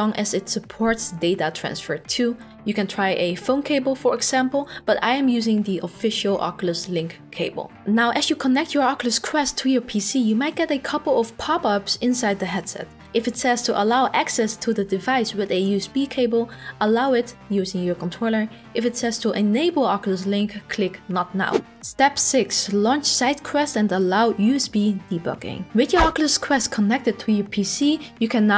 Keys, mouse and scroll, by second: 28.3 click.